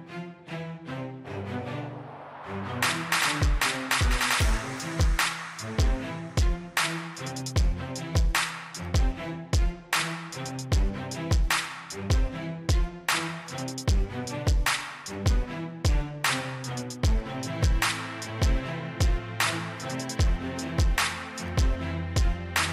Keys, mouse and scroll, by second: 3.0 8, 3.5 Return, 4.9 click, 5.2 right click, 6.0 click, 6.6-7.3 scroll up 1, 7.3-9.8 scroll down 1, 9.8 click, 16.7 right click, 17.6 click, 18.3 right click, 19.2 click, 20.0-21.7 scroll up 1, 21.7-22.7 drag.